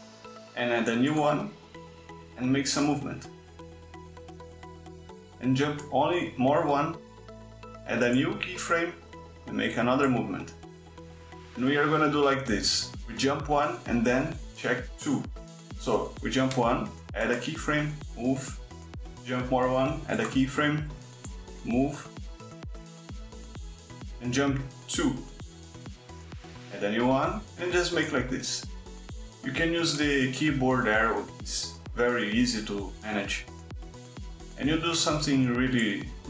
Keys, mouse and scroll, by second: 0.4 Right, 0.7 Right, 1.9 click, 3.7 click, 6.2 Right, 6.9 click, 8.3 click, 15.6 Right, 16.1 Right, 16.7 click, 18.1 click, 19.5 Right, 20.7 click, 21.5-22.6 drag, 25.2 Right, 25.6 Right, 26.2 click, 28.0 click, 28.9 Right, 29.2 click, 29.7 click, 30.3 Right, 30.7 click, 31.1 click, 31.7 Right, 31.8 click, 32.2 click, 32.8 Right, 33.3 click, 33.7 click, 34.3 Right, 34.4 click, 34.8 click.